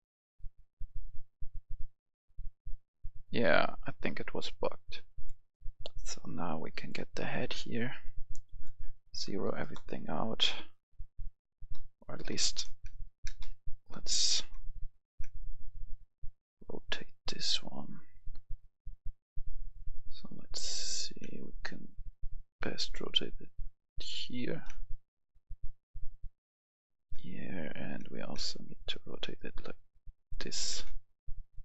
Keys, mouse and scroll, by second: 8.8 KP_0, 9.0 click, 9.3 KP_0, 9.6 Return, 12.3 space, 12.6 right click, 15.3 space, 21.3 space, 22.8-24.3 drag, 25.3 space, 28.4 space, 29.0-30.3 drag, 31.3 space.